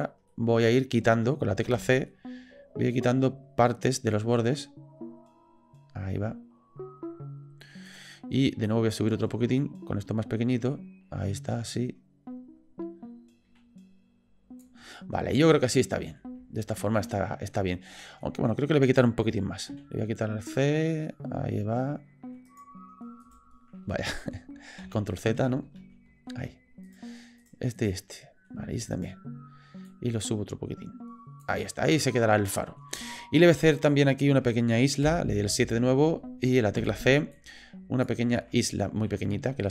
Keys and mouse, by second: 0.3 middle click, 8.7-14.6 middle drag, 14.8-16.2 middle drag, 16.6 shift+middle click, 17.1 middle click, 18.2 middle click, 23.2 click, 24.8 ctrl+z, 25.8 ctrl+z, 26.8 shift+click, 27.4 shift+click, 27.7 shift+click, 28.1 middle click, 28.9 shift+click, 29.9-31.4 middle drag, 31.6-32.8 middle drag, 33.1 shift+middle click, 33.9 middle click, 35.0 KP_7, 36.8 c.